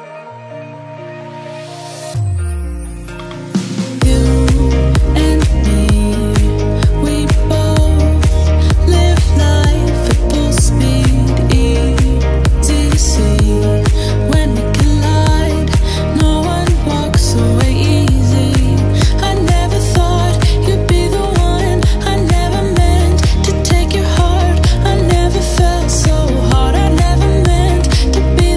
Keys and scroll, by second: 8.2 ctrl+t.